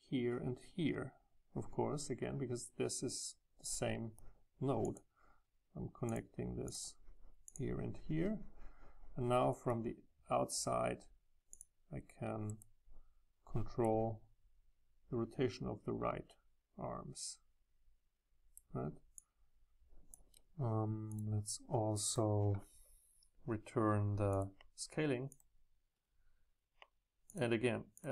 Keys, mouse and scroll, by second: 4.9-9.4 drag, 11.5 click, 12.5-13.8 middle drag, 13.8 right click, 16.3-17.9 middle drag, 22.3-24.1 drag, 24.4-25.3 drag, 25.3-28.0 ctrl+drag, 27.3 Left, 28.0-28.1 middle drag.